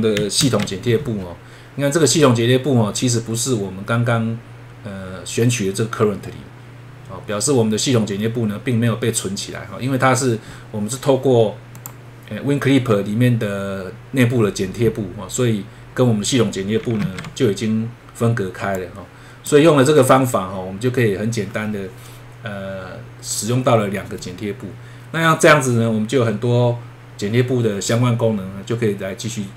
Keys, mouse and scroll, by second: 0.4 ctrl+`, 11.7 click, 17.0 ctrl+`, 18.7 click.